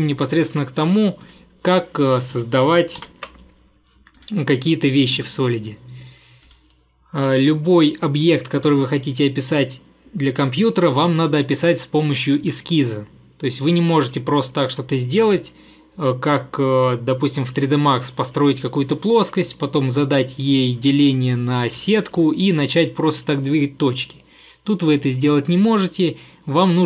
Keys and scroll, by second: 3.1 ctrl+8.